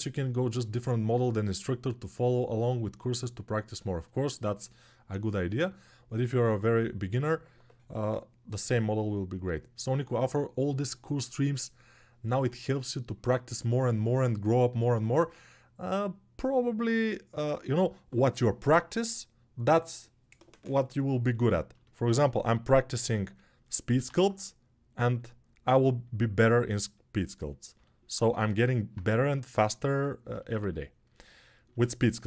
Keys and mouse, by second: 22.7 g, 23.8 alt+q, 27.5-32.2 alt+drag.